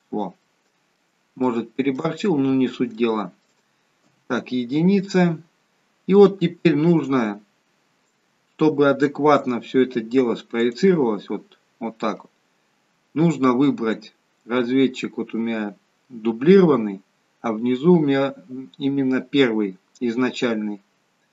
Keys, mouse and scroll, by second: 0.3 middle click, 1.4 shift+middle click, 2.1-3.5 scroll down 5, 3.0 shift+middle click, 4.1 KP_1, 8.0-8.7 scroll up 2, 10.7 click.